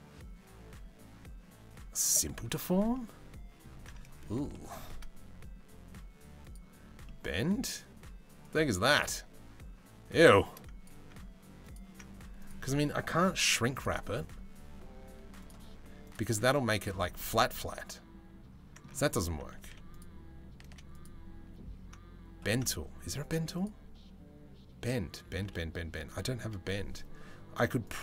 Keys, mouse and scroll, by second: 2.5-3.9 middle drag, 4.1 shift+middle click, 6.0 click, 8.1-10.5 middle drag, 12.0-13.5 middle drag, 16.1-16.5 middle drag, 17.1-18.4 middle drag, 19.2 z, 20.2 z, 22.8 click, 23.2-26.7 drag, 27.4-28.0 drag.